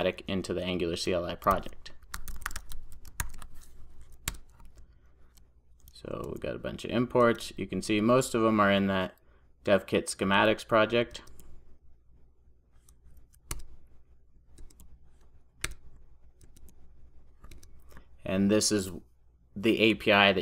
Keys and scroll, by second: 3.3 super+j, 4.4 Return, 9.2 alt+Return.